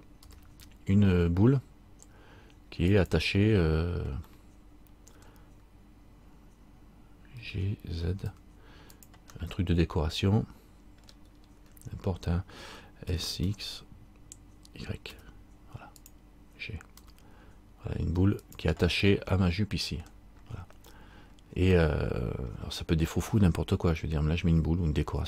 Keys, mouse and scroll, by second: 0.4 g, 4.5 middle click, 7.6 g, 9.5 middle click, 10.6 middle click, 11.5-11.8 scroll up 2, 13.2 s, 17.1 g, 19.2 middle click, 21.3-21.8 scroll down 1, 21.9 middle click.